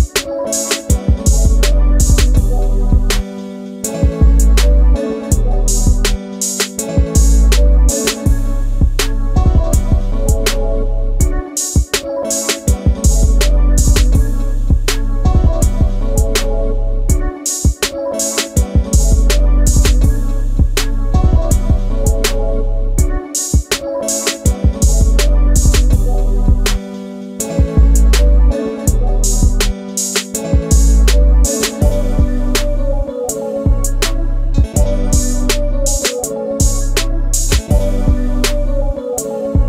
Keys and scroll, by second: 3.4 t, 7.0 a, 11.3 space, 23.3 m, 26.7 q, 29.2 m, 32.9 shift+e, 35.5 space, 38.9 space.